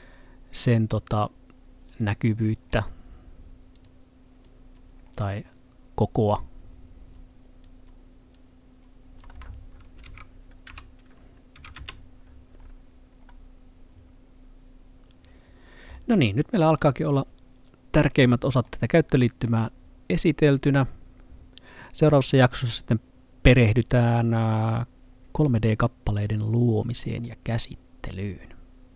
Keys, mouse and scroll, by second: 2.7-3.8 scroll down 1, 3.8 click, 5.1-6.2 scroll down 1, 6.2 click, 10.1-11.7 typing, 11.8 Return, 13.2-15.9 scroll down 1, 15.9 middle click, 27.0 middle click.